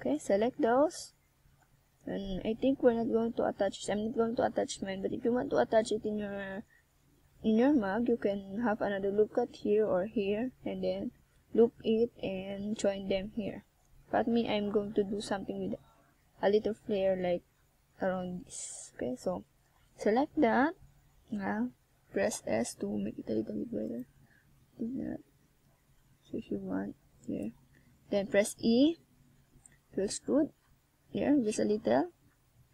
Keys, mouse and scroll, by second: 3.7 shift+click, 4.8 shift+click, 5.2 middle click, 6.8 KP_1, 8.7 click, 9.6 z, 10.0 click, 11.8 z, 12.5 middle click, 13.0 s, 15.7 KP_1, 16.2 z, 17.3 s, 18.3 click, 18.5 z, 19.0 middle click, 20.8 KP_1, 21.2 z, 22.4 click, 23.2 z, 23.4 middle click, 27.3 s, 28.0 click, 28.3 middle click, 30.0 KP_0, 31.0 scroll up 2.